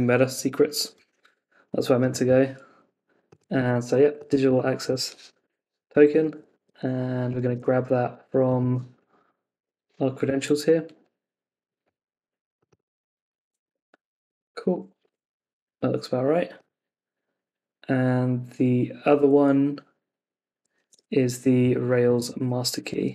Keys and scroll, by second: 3.6 super+v, 6.5 super+Tab, 9.1 Up, 9.5 Return, 13.3 super+c, 13.7 super+Tab, 15.0 super+v, 17.6 super+v, 20.8 super+Tab.